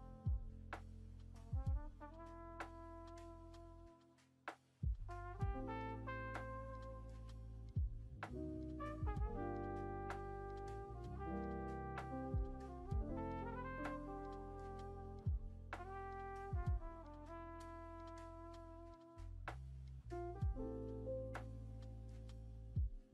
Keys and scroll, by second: 6.2 g, 12.9 space, 13.4 space, 13.4 space, 16.0 space, 16.5 space, 20.6 F1, 22.3 v.